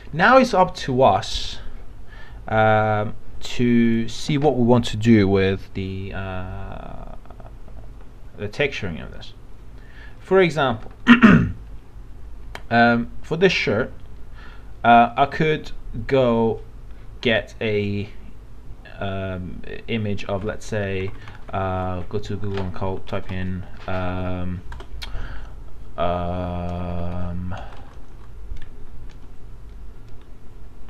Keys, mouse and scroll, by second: 3.9 click, 20.4 alt+Tab, 21.2 alt+Tab, 21.5 alt+Tab, 22.9 r, 24.1 ctrl+a, 24.8 ctrl+BackSpace, 26.7-27.6 typing.